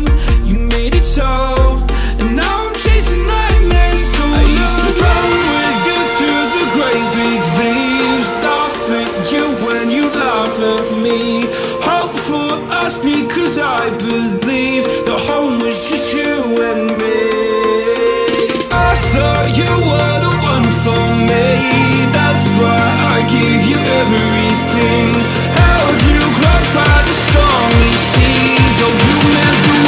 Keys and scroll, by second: 1.7 space, 2.2 space, 2.3 space, 6.6-7.6 typing, 13.4-16.3 typing, 25.1 a, 25.5 space, 26.0 super+space, 26.0 super+space, 26.2 super+space, 26.2 super+space.